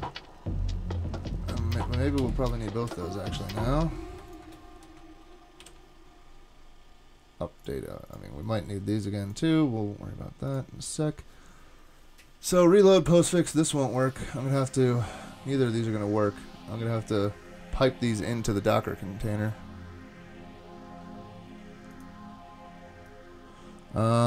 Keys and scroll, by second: 2.2 super+z, 5.6 super+/.